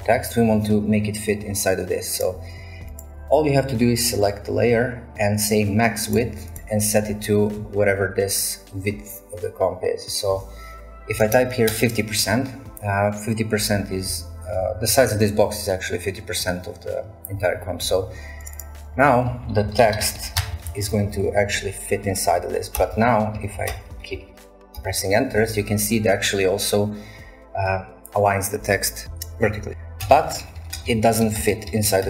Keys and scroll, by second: 10.9-11.7 typing, 19.0-21.9 typing, 22.8 Return, 23.1-25.3 typing, 24.8 shift+Return, 30.0 Return, 30.2-32.0 typing, 30.8 shift+Return, 31.4 shift+Return.